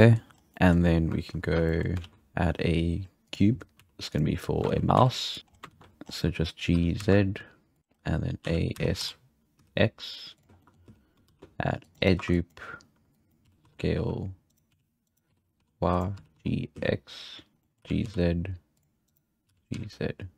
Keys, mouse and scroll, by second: 0.0-0.3 shift+middle drag, 0.3 scroll up 3, 0.5-2.0 middle drag, 2.0 shift+a, 3.8 s, 4.8 ctrl+z, 5.0 s, 5.4 scroll up 2, 5.5 scroll down 5, 5.7 ctrl+z, 6.1-6.7 scroll up 5, 6.7 g, 7.8 middle click, 8.4 a, 8.7 s, 10.6 shift+middle click, 10.7 scroll up 4, 10.9 z, 11.3 ctrl+r, 12.2 1, 12.3 click, 13.1 click, 13.5 s, 14.7-16.2 typing, 17.5 right click, 17.6 middle click, 17.8 g, 19.1-19.5 right drag, 19.5 g.